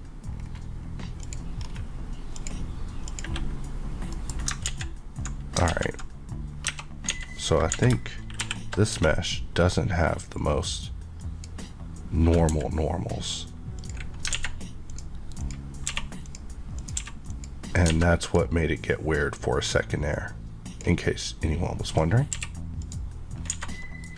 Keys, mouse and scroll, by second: 0.3 scroll down 1, 1.2 click, 1.6-2.0 scroll, 4.1 middle click, 4.6 ctrl+z, 5.6 ctrl+z, 6.6 Tab, 7.1-8.4 typing, 8.9 Tab, 10.3 click, 12.5 x, 13.8 click, 14.3 alt+a, 14.9 click, 15.9 q, 16.2 click, 16.9 click, 17.2 click, 17.9 alt+a, 18.2 click, 18.7 scroll up 1, 20.1 click, 22.3 click, 22.3 q, 22.8 click, 23.4 scroll, 23.4 scroll down 1, 23.5 a, 23.8 middle click.